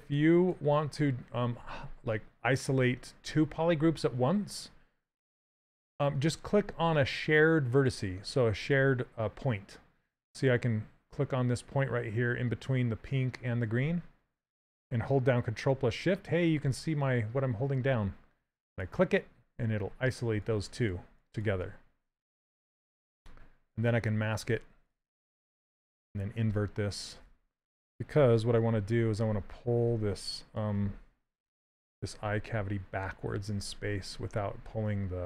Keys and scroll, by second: 28.5 shift+f, 33.9 s.